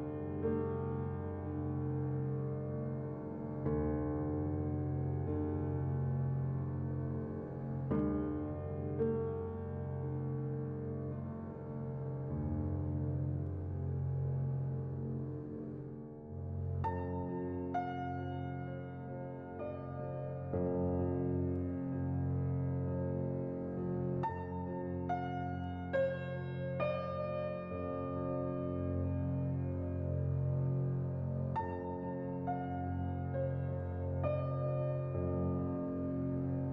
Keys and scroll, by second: 3.5 Delete, 5.5 a, 7.5 z, 10.9 Delete, 14.1 a, 15.9 z, 21.8 a.